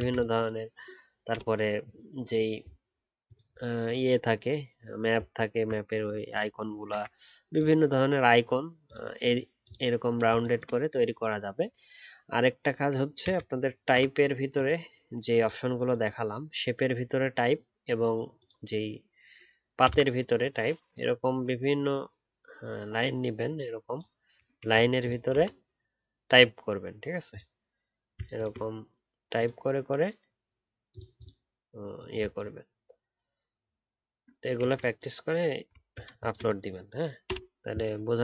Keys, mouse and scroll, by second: 5.6-7.0 alt+scroll up 1, 28.3 ctrl+click, 32.3-33.3 alt+scroll up 1, 33.5-35.8 alt+scroll down 1, 35.8-38.2 alt+scroll down 1.